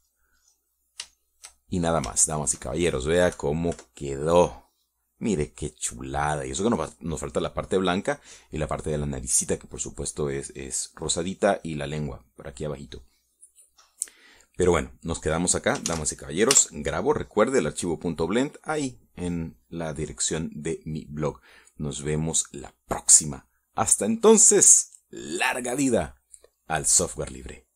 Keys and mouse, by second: 0.7-1.8 drag, 2.0 middle click, 2.7 shift+click, 3.6 shift+middle click, 4.9 KP_Subtract, 5.8 click, 17.4 ctrl+s.